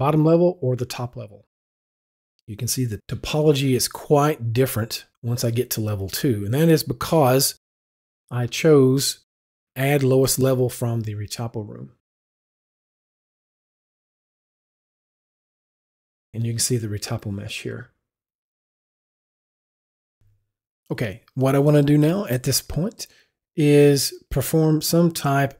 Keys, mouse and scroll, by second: 5.7 Down, 5.8 click, 7.8 click, 14.2 click, 15.0 click, 18.3 click, 19.4 click.